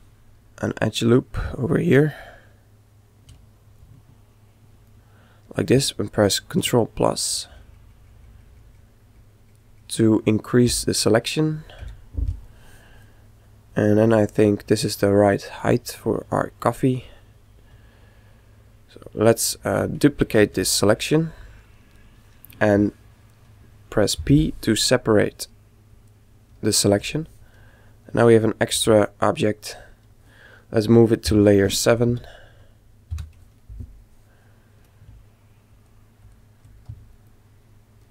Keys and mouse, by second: 1.5 right click, 4.1-5.8 right drag, 6.5 ctrl+KP_Add, 7.2 ctrl+KP_Add, 7.5 ctrl+KP_Add, 7.8 ctrl+KP_Add, 7.9 ctrl+KP_Add, 8.0 ctrl+KP_Add, 8.2 ctrl+KP_Add, 8.3 ctrl+KP_Add, 8.5 ctrl+KP_Add, 8.7 ctrl+KP_Add, 8.8 ctrl+KP_Add, 9.3 ctrl+KP_Add, 9.6 ctrl+KP_Add, 9.8 ctrl+KP_Add, 10.1 ctrl+KP_Add, 11.4 ctrl+KP_Add, 13.1-14.9 middle drag, 20.5 shift+d, 24.2 p, 27.0 Tab, 27.9 right click, 28.8 g, 30.8 m, 35.7 click, 36.8 z.